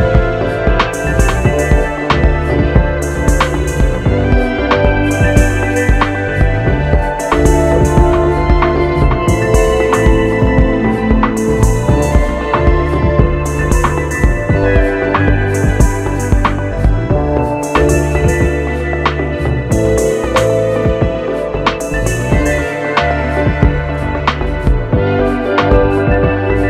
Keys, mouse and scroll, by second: 5.5 ctrl+a, 7.8 click, 13.5-15.5 drag.